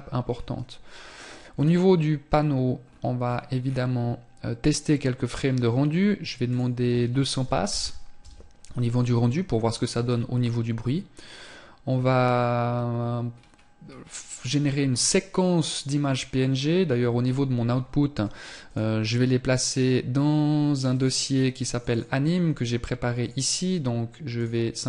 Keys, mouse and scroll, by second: 0.1 click, 2.0 scroll down 1, 4.3 scroll down 11, 5.7 click, 7.0 KP_0, 12.5 scroll up 2, 16.2 scroll up 3, 23.5 click.